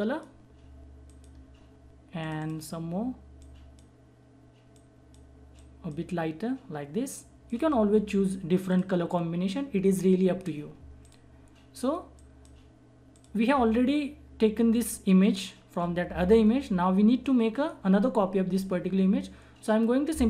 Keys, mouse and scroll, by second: 11.0 click.